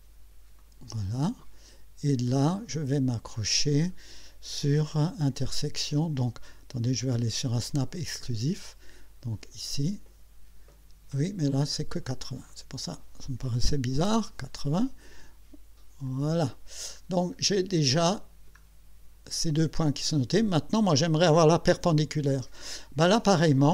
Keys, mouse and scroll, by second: 0.6 click, 7.1 click, 12.5 click, 13.7-14.6 typing, 16.1 click, 17.0 scroll up 1, 17.9 middle click.